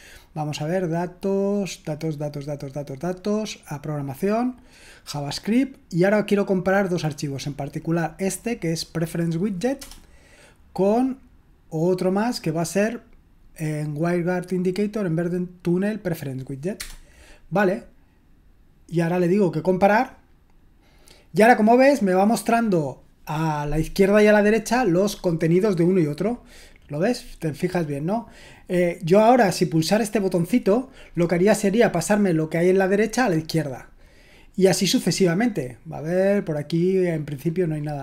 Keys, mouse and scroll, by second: 5.2 click, 9.8 Return, 16.3 click, 16.8 Return, 19.5-22.6 drag, 22.6-25.4 scroll up 1, 25.4-26.4 scroll down 1, 26.4-34.0 scroll down 1, 34.0-38.0 scroll down 1.